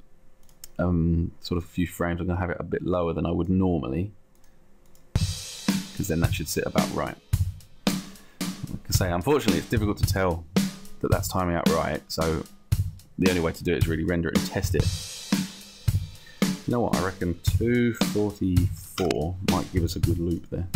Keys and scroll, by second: 18.0 2, 18.3 4, 19.1 Return.